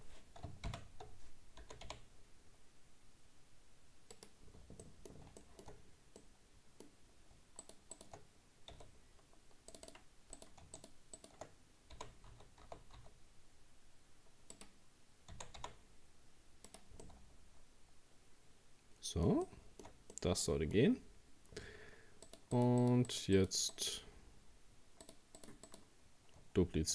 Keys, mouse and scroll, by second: 0.8 ctrl+z, 1.6 g, 4.5-4.8 scroll down 1, 4.8 middle click, 5.8-6.2 scroll up 2, 6.2-7.6 middle drag, 7.6 shift+right click, 7.9 shift+right click, 8.7 f, 9.7 right click, 9.9 right click, 10.4 right click, 10.8 shift+right click, 11.2 shift+right click, 11.9 g, 15.3 r, 17.0-20.9 middle drag, 20.9-22.3 scroll up 2, 22.3 shift+right click, 22.5 shift+right click, 22.8 shift+right click, 23.1 shift+right click, 23.4 shift+right click, 23.7 shift+right click, 25.0 shift+right click, 25.4 shift+right click, 25.7 shift+right click.